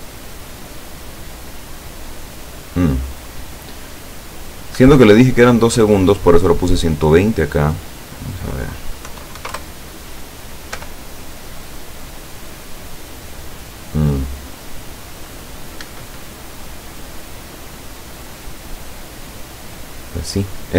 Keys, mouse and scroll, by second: 4.8 Escape, 7.8 click, 9.1 KP_6, 9.4 KP_0, 9.6 KP_Enter, 10.8 p, 15.9 Escape.